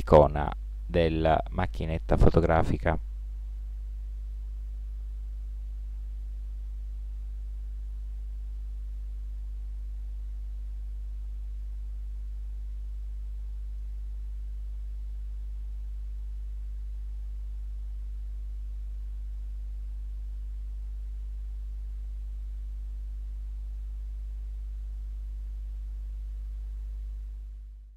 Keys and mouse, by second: 2.9-4.6 drag, 9.4-10.8 middle drag, 14.9-17.0 middle drag.